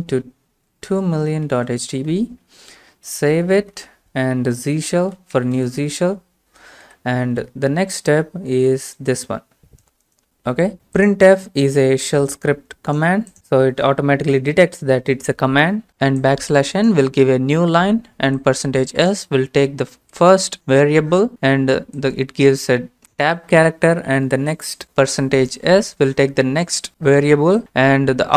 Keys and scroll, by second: 1.5 ctrl+v, 2.7-6.3 typing, 6.9 Return, 7.5 alt+Tab, 9.8-10.5 typing, 10.7 alt+Tab, 10.7 ctrl+v, 13.9 Right, 14.4 Right, 14.5 Right.